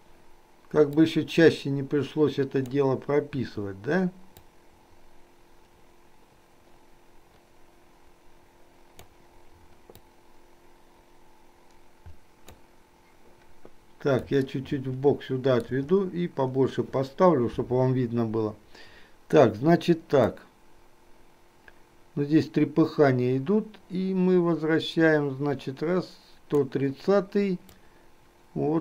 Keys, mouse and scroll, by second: 1.0-2.9 drag, 3.4 i, 4.5-9.1 drag, 10.1-12.6 drag, 14.6-15.8 shift+middle drag, 20.4-26.6 drag, 27.9-28.8 drag.